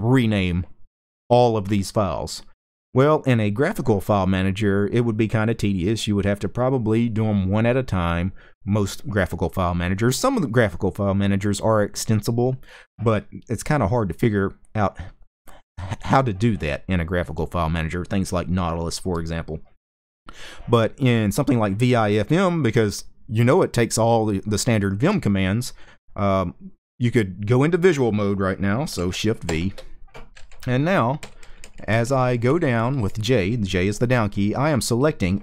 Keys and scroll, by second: 30.6-34.6 typing.